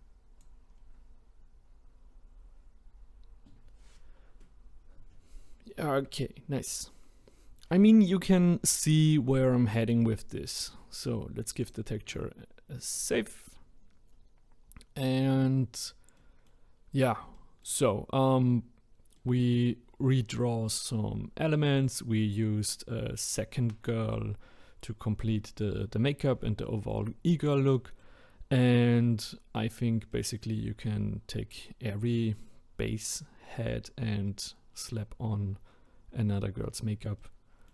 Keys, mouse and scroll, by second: 0.7-1.3 scroll down 1, 1.3-1.9 scroll down 10, 1.9-3.8 scroll up 5, 3.8-5.1 scroll up 1, 5.7-8.8 scroll down 2, 11.6-14.6 drag, 14.6-15.4 scroll down 1, 15.4-16.7 middle drag, 16.7-17.3 scroll up 2, 17.3-24.7 shift+middle drag, 26.6-27.2 middle drag, 27.2-27.7 scroll down 1, 27.7-28.6 middle drag, 28.6-29.0 scroll up 2, 29.0-29.6 scroll down 1, 29.6-33.1 middle drag, 37.2-37.7 middle drag.